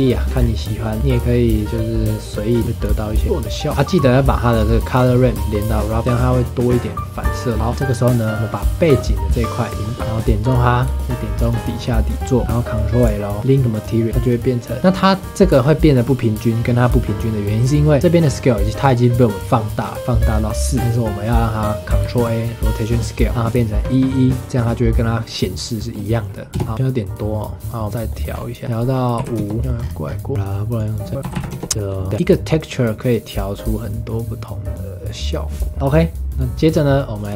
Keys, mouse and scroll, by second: 0.4 scroll down 2, 0.6 middle click, 0.9-2.6 drag, 3.1-3.8 middle drag, 3.8 scroll down 2, 4.1-4.6 middle drag, 4.6 click, 7.5 scroll down 4, 7.6 scroll up 5, 7.7 ctrl+s, 8.9 click, 9.4 click, 9.7 scroll down 4, 9.9 middle click, 10.0 scroll up 8, 10.4 click, 10.9-11.4 shift+middle drag, 11.4 shift+click, 13.4 ctrl+l, 14.1 middle drag, 14.2 click, 15.6-18.2 scroll up 3, 20.3 scroll down 3, 20.8 scroll up 4, 22.0 ctrl+a, 26.5 KP_0, 26.6 scroll up 3, 26.7-27.3 scroll down 2, 27.8 middle click, 28.3-28.6 scroll up 3, 28.6 click, 29.6 middle click, 29.8-30.3 scroll up 5, 30.7 click, 31.6 scroll up 3, 31.7 scroll down 3, 31.7-32.1 middle drag, 32.1-33.9 drag, 35.7 ctrl+s, 37.2 click.